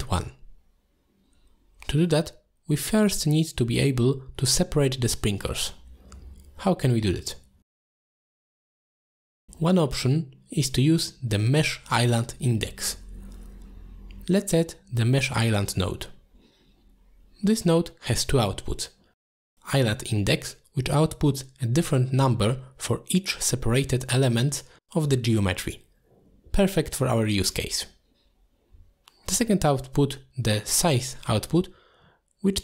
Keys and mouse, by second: 0.9 middle drag, 1.6 shift+middle drag, 3.3 click, 3.8 middle click, 4.3 shift+a, 9.1 ctrl+shift+click, 9.5 middle click, 10.1 ctrl+shift+click, 11.6 ctrl+shift+click, 12.4 middle drag, 17.6 click, 18.4 click, 18.8 click, 19.2 click, 21.6 click, 27.3 click, 28.0 ctrl+shift+click.